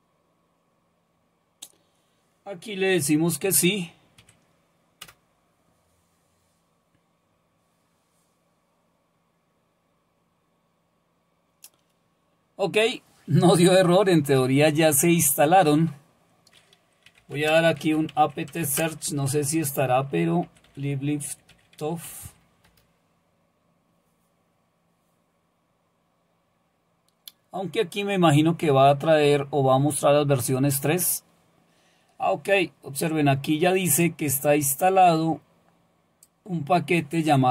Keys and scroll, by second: 4.2-5.0 typing, 16.8-22.8 typing.